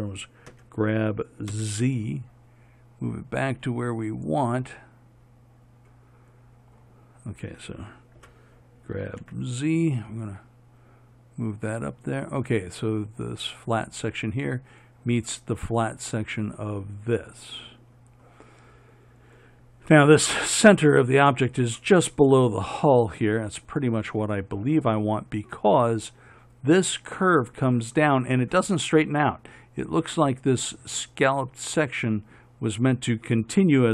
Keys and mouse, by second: 8.4 g.